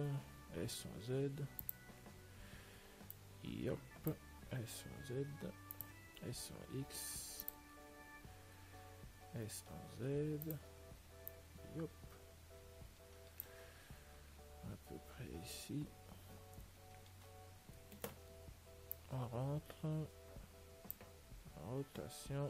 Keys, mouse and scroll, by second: 0.8 s, 3.4 click, 4.8 s, 6.3 s, 8.9-11.6 middle drag, 11.6 click, 14.8-17.0 middle drag, 19.2-21.2 drag, 21.6 r.